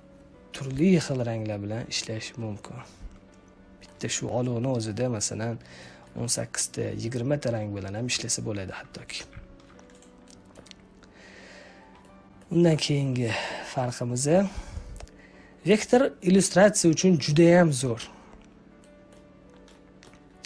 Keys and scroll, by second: 9.1 z.